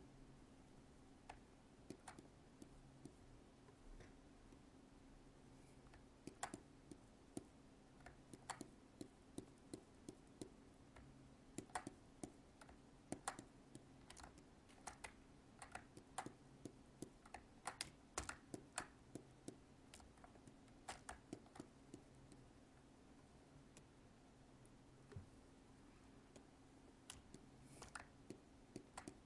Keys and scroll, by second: 14.2 alt+space, 20.1 alt+space.